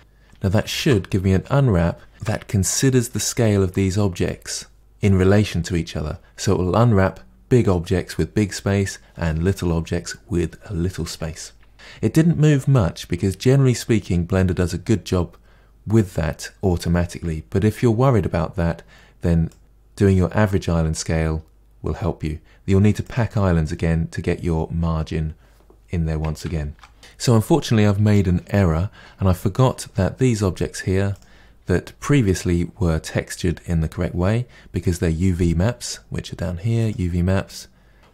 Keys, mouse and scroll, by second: 0.0 ctrl+space, 0.6-1.9 scroll down 10, 1.9 shift+middle click, 2.3-2.7 scroll down 1, 2.7-23.1 middle drag, 27.0 click, 31.1 click.